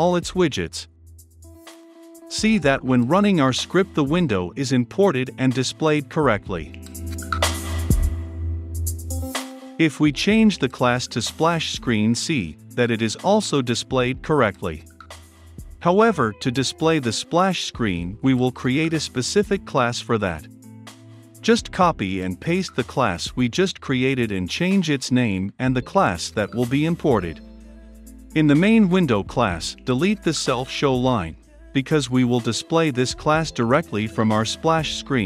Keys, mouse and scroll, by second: 1.8 ctrl+F5, 4.9-6.9 drag, 6.9 right click, 7.8 click, 8.1 right click, 8.4 click, 11.8 ctrl+c, 12.2 ctrl+click, 12.6 ctrl+v, 13.7 ctrl+F5, 17.4 click, 17.9 ctrl+z, 18.5 click, 19.1 ctrl+c, 19.4-20.6 typing, 20.2 click, 21.6 click, 22.6-24.7 typing, 23.4 Return, 24.6 click, 26.1 ctrl+c, 26.7 ctrl+click, 27.1 ctrl+v, 28.0-29.1 ctrl+drag, 29.6-30.7 drag, 30.7 Return, 31.6 click, 32.3 Return, 34.8-35.2 drag.